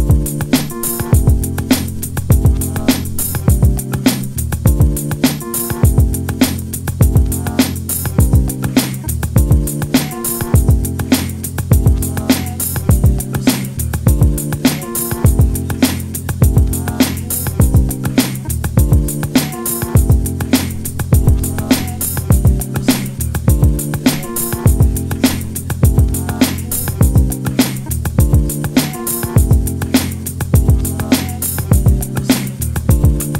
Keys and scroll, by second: 31.9 space.